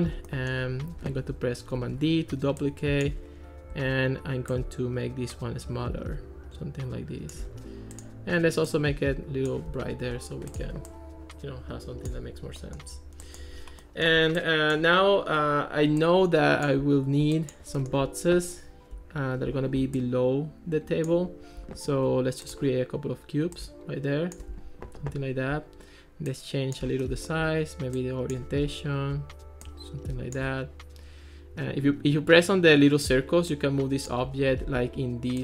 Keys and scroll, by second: 34.8 ctrl+s.